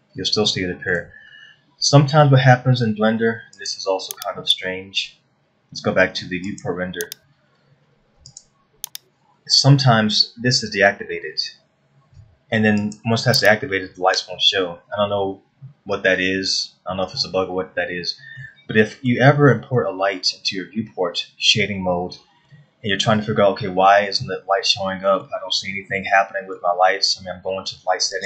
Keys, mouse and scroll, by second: 1.1 shift+middle click, 4.2 click, 7.1 click, 8.9 click, 19.0 middle click, 23.1 middle click, 24.9 middle click, 27.7 middle click.